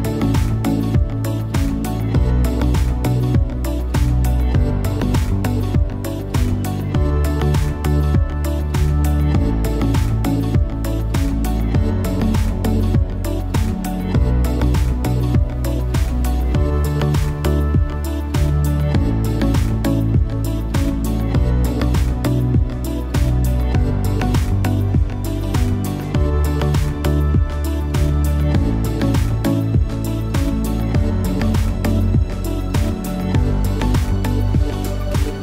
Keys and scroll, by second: 1.6 a, 2.2 shift+a.